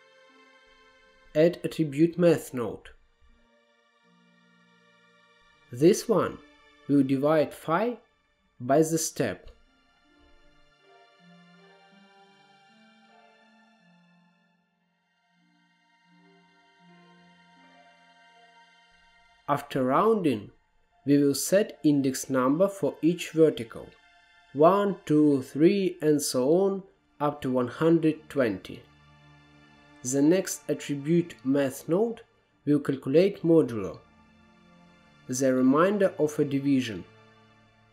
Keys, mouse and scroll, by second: 0.6 click, 1.1 shift+a, 6.5-7.2 drag, 7.6-8.1 drag, 8.1 middle click, 8.3-11.0 drag, 11.4 middle click, 12.4 click, 13.8 middle click, 14.1 shift+a, 15.1-15.5 scroll down 1, 15.5 click, 15.8 middle click, 15.9 click, 16.7 middle drag, 17.0-17.6 drag, 17.6 middle click, 17.8 scroll up 1, 18.0 middle drag, 18.3-18.9 drag, 19.7-22.5 drag, 22.5-23.2 scroll up 3, 24.8-29.1 drag, 29.1 middle click, 29.4 click, 29.7 shift+a, 33.4-36.4 drag, 36.8-37.9 middle drag.